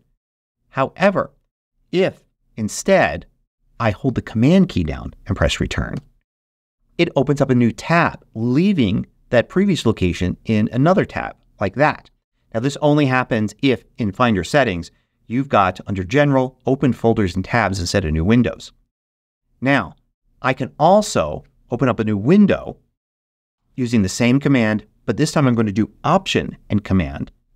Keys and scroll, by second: 2.8 shift+super+g, 5.9 super+Return, 23.5 shift+super+g.